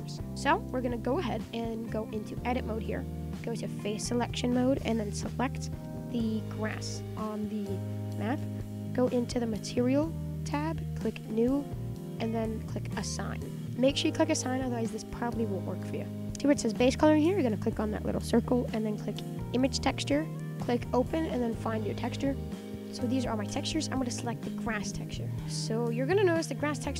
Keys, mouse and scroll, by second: 0.3-2.4 middle drag, 2.4 Tab, 3.9 click, 5.5 alt+shift+click, 6.2 middle drag, 6.5-7.1 scroll up 7, 7.1-9.6 shift+middle drag, 9.6 click, 11.3 click, 13.4-14.7 shift+middle drag, 14.7 scroll down 5, 14.9-15.5 middle drag, 15.5-18.0 scroll up 3, 18.0 click, 22.4 click, 24.6 shift+middle click, 24.9 scroll down 3, 25.1-26.9 middle drag.